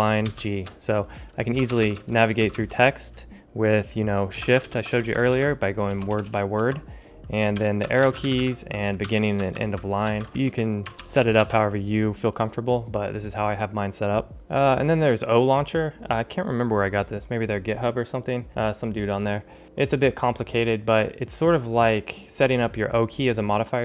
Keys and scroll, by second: 1.5 ctrl+alt+shift+super+Left, 1.6 ctrl+alt+shift+super+Right, 2.6 ctrl+alt+super+Right, 6.6 alt+shift+Left, 7.4 ctrl+alt+shift+super+Left, 7.7 ctrl+alt+shift+super+Right, 8.2 Down, 8.9 Left, 9.3 ctrl+alt+shift+super+', 10.3 ctrl+alt+shift+super+Left, 10.9 ctrl+alt+shift+super+Right, 14.3 ctrl+alt+shift+super++.